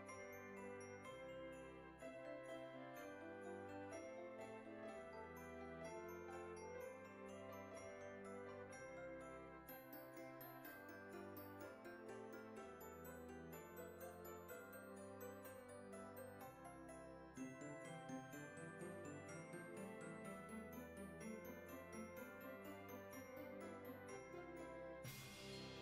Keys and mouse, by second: 2.1 shift+click, 3.7 shift+click, 4.7 shift+click, 6.1 shift+click, 7.0 middle click, 8.4 click, 9.4 click, 10.7 middle click, 13.5 alt+z, 14.5 middle click, 15.9 click, 18.9 middle click, 20.7 shift+middle click, 22.2 z, 23.0 alt+shift+click, 25.2 shift+middle click.